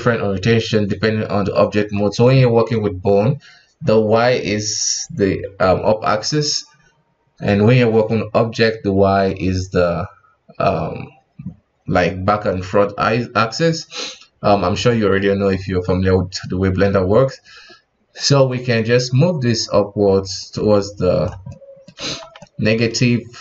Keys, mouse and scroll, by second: 18.3-21.4 drag, 21.5-22.0 middle drag, 22.0 KP_1, 22.4-23.4 middle drag.